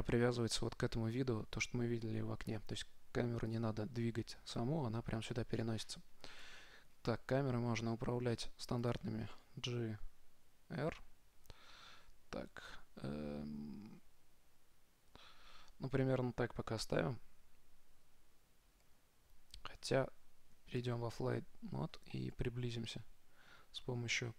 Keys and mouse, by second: 3.7-5.6 right drag, 6.7 g, 21.0 shift+f.